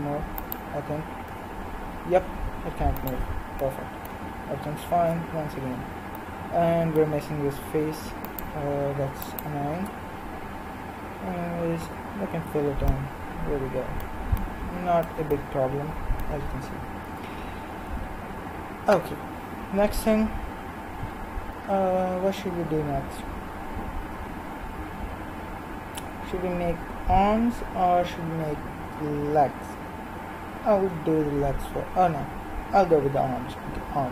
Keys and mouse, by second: 1.3 g, 5.1 KP_1, 8.3-11.9 right drag, 11.9 f, 13.1-14.8 middle drag, 15.3-17.0 middle drag, 17.0 KP_1, 20.0 middle click.